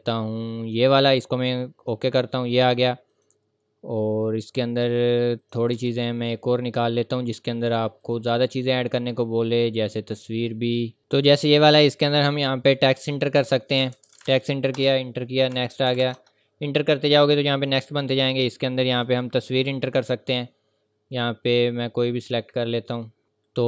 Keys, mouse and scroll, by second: 0.8 click, 5.7 Delete, 6.1 scroll up 1, 6.5 scroll down 1, 8.0 click, 9.6 scroll down 1, 11.0 click, 11.2 scroll down 1, 11.5-12.1 scroll up 1, 12.1 click, 13.8 typing, 14.7 Return, 15.3-16.0 typing, 16.1 Return, 18.1 click.